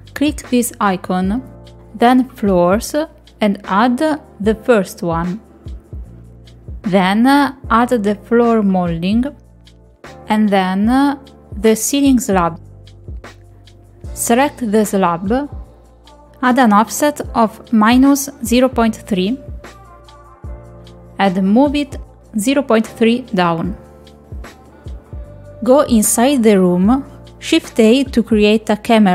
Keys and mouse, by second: 3.6 click, 7.4 middle click, 10.4 click, 14.8 click, 15.5 middle click, 15.9 shift+middle click, 16.2 click, 17.8 click, 18.3 click, 18.7-19.7 drag, 20.2-21.7 drag, 24.5 click, 26.5 middle click, 27.6 middle click, 28.6 shift+a.